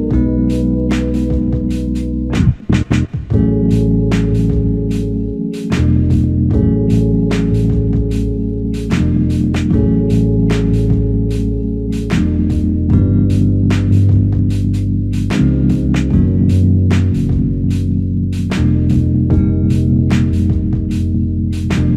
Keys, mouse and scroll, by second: 0.2 shift+click, 3.1 alt+click.